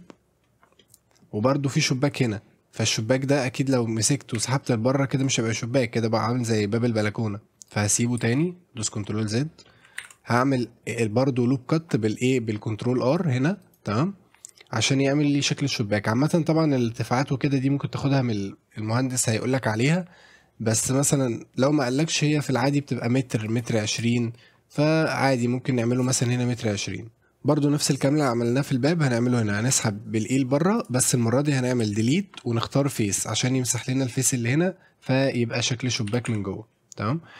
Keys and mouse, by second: 0.8 middle click, 3.0 middle click, 4.0 click, 4.4 e, 7.7 right click, 8.3 ctrl+z, 9.7 middle click, 10.0 ctrl+r, 13.1 click, 20.9-23.6 drag, 23.9-26.0 shift+drag, 29.7 e, 31.8 Delete, 35.1 middle click, 35.7 middle click, 36.1 shift+f, 36.3 Tab, 37.1 middle drag.